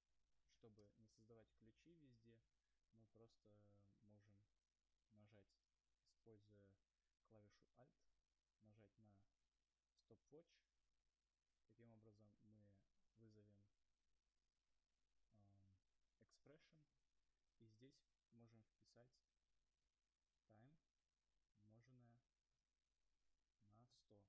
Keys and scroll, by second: 3.7 Return, 4.3 Return.